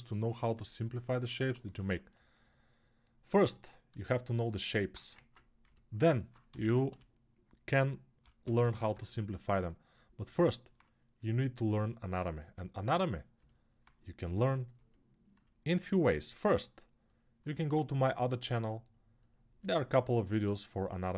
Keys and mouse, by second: 3.7 alt+q, 6.2 g, 6.7-10.0 ], 19.7-21.1 right drag.